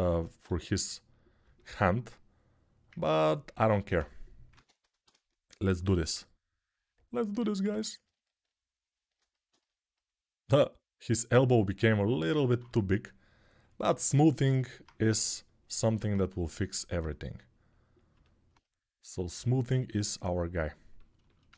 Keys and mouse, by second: 0.2 g, 4.3 ctrl+Tab, 5.7 ctrl+d, 7.5 ctrl+r, 8.0-21.5 shift+drag, 14.8 g.